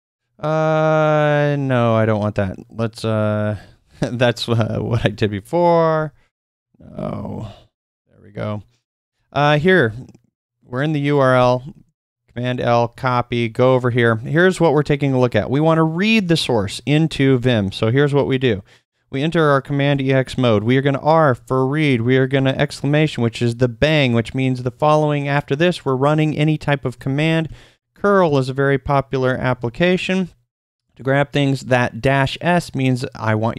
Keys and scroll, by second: 3.4-7.8 typing, 9.0 super+Tab, 11.3 super+l, 12.5 super+c, 12.9 super+Tab, 19.8 typing, 21.3-22.3 typing, 27.8-29.2 typing, 29.6 super+v.